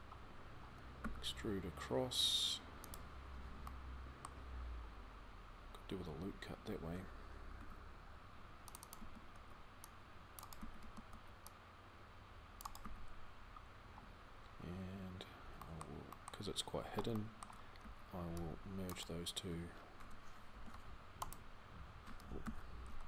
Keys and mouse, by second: 0.8 e, 7.3 ctrl+r, 8.8 a, 9.1 c, 10.6 a, 10.9 c, 12.7 f, 13.4-15.4 middle drag, 15.9 middle click, 17.6 c, 20.3 alt+m, 22.2 ctrl+z, 22.6 a, 23.0 a.